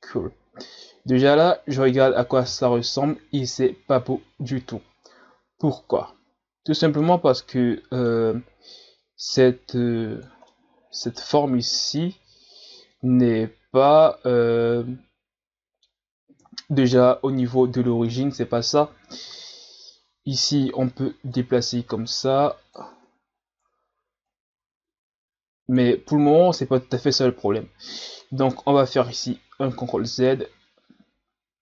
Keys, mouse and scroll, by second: 2.4 KP_1, 7.0-9.3 middle drag, 9.3-10.5 drag, 10.5-13.5 middle drag, 13.8-16.4 middle drag, 16.4 KP_1, 17.5-17.9 scroll up 1, 17.9 Tab, 18.7 a, 18.9 a, 21.3-22.9 drag, 22.9 Tab, 24.3-27.3 drag, 28.2 ctrl+z, 29.8 ctrl+z, 30.5 ctrl+z, 31.0 ctrl+z, 31.5 ctrl+z.